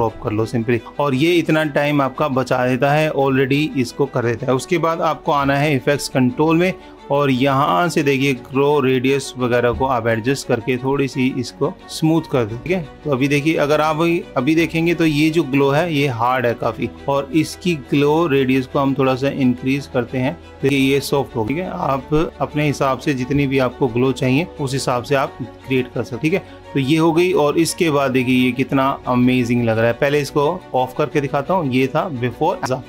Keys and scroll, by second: 0.3 super+-, 10.2 super+-, 23.8 super+-.